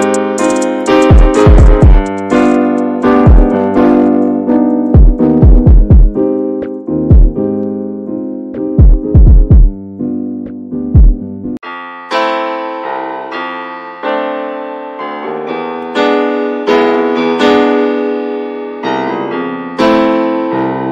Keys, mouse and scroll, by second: 0.1 middle click, 0.2 ctrl+s, 0.9 /, 1.3-1.7 drag, 1.7 middle click, 2.0 ctrl+s, 2.7-3.2 scroll up 1, 3.2-3.9 shift+middle drag, 3.9 ctrl+s, 4.3 shift+middle click, 4.5 click, 4.8 scroll down 1, 5.0-6.5 middle drag, 6.5 scroll down 2, 6.8 middle drag, 7.1 ctrl+s, 7.5 click, 8.0 /, 8.5-14.2 middle drag, 14.2 Tab, 14.6 click, 15.1 click, 15.6 shift+middle click, 15.7 scroll up 1, 16.2 3, 16.3-18.1 drag, 18.1 middle click, 19.0 click, 20.6 x, 20.8 Tab.